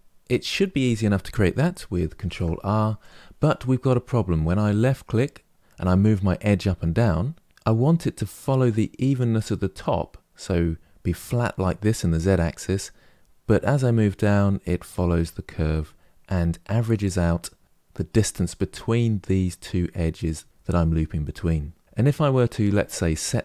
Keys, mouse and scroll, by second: 2.0 ctrl+r.